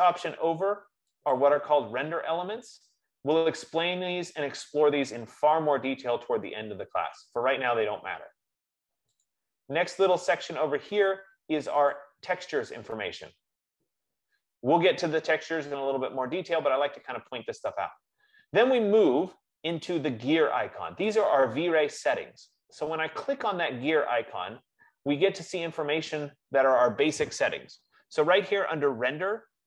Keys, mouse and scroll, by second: 1.7-4.0 drag, 9.4 click, 12.3 click, 13.0 click, 21.3 click, 23.0-27.0 drag.